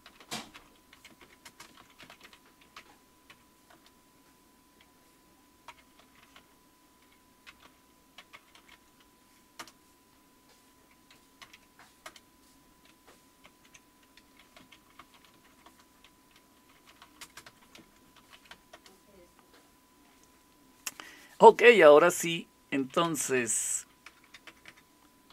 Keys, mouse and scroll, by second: 0.0-3.3 typing, 3.7 Return, 4.9-9.6 typing, 11.2-12.2 typing, 13.4 ctrl+x, 14.4-19.0 typing, 22.8-25.3 typing.